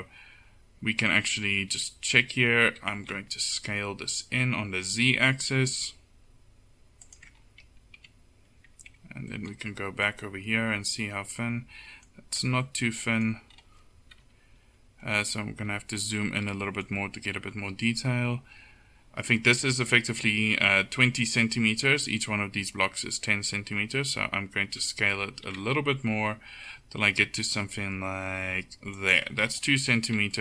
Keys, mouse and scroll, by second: 1.8 Tab, 2.7 s, 8.1 a, 9.0 Tab, 12.5 Tab, 14.3 KP_1, 15.8 a, 24.7 s, 30.2 Tab.